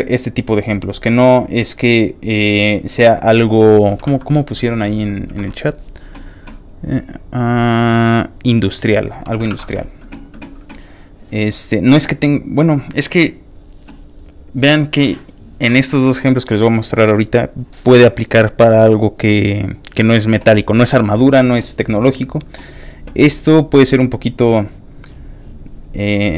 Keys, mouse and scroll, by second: 0.2-1.1 scroll down 4, 1.5 scroll up 1, 1.5 scroll down 1, 1.5 scroll up 2, 4.0 alt+Tab, 6.8-7.5 scroll up 3, 7.5-8.5 scroll up 1, 8.5-9.0 scroll down 2, 9.5 alt+Tab, 11.1 alt+click, 13.5 scroll up 1, 13.7 scroll down 1, 14.3 middle click, 14.3 scroll up 1, 15.0 middle click, 20.0 middle click, 20.0 scroll up 1, 20.9 click, 23.0-25.1 scroll down 2, 25.1 click, 25.8 click.